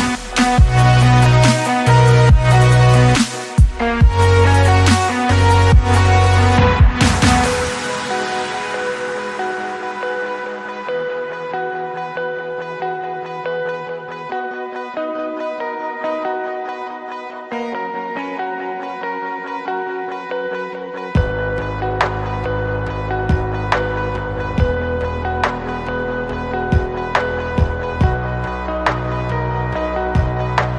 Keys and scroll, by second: 2.5 shift+f, 4.1 Escape, 8.7 ctrl+s, 9.9 l, 18.3 Up, 25.3 m, 30.4 Escape.